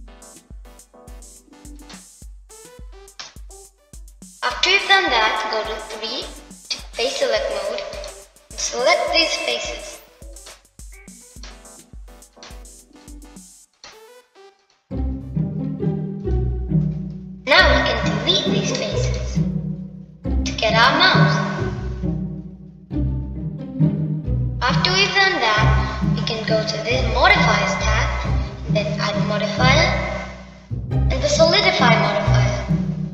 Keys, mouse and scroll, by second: 12.2 shift+click, 13.2 shift+click, 14.2 shift+click, 14.8 shift+click, 15.6 shift+click, 16.5 shift+click, 18.1 shift+click, 19.0-20.0 middle drag, 20.0 l, 21.6-22.9 middle drag, 24.6 middle click, 26.9 Tab, 29.3 click, 30.8-33.1 drag.